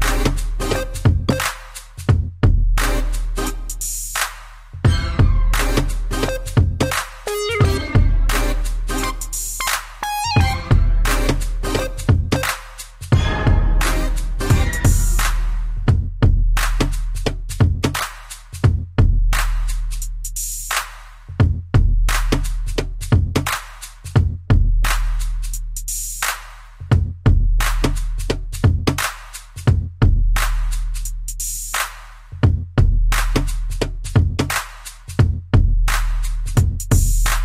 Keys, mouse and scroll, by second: 0.0 middle click, 1.7 click, 1.8 click, 2.4 middle click, 4.5 click, 7.4-7.8 typing, 8.2 click, 9.0 click, 9.4 b, 9.8 middle click, 11.6 click, 14.8 click, 14.9 click, 15.8-17.5 typing, 18.1 click, 18.5 middle click, 21.1 click, 21.3 click, 22.8 click, 24.0 middle click, 25.0 Down, 25.8 Up, 27.8 middle click, 28.8 scroll down 1, 29.4 middle click, 30.4 1, 32.9 click, 34.5 Up, 36.3-37.4 typing.